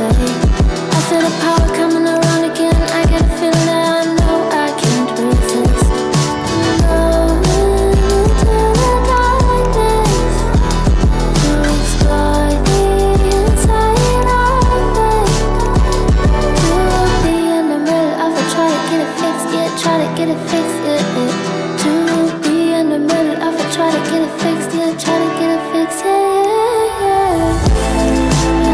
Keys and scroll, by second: 0.0 F8, 2.8 F8, 3.8 KP_1, 3.9 Return, 4.4 KP_1, 4.5 Return, 5.1 Return, 5.5 End, 5.5 1, 5.6 Return, 6.1 Return, 6.6 Return, 10.6 Tab, 11.2 Delete, 16.3 F8, 18.4 Tab, 21.4 Tab.